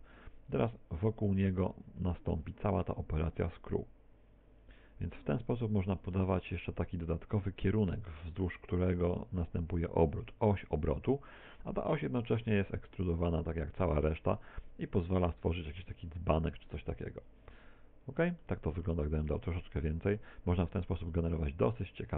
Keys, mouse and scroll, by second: 0.0 right click, 0.8 shift+d, 1.6 click, 2.0 e, 3.0 click, 3.2 e, 4.6 click, 5.6 shift+right click, 6.1 shift+right click, 6.9 a, 7.2 a, 9.8 click, 11.3 middle click, 17.6 middle click, 19.0 shift+middle click.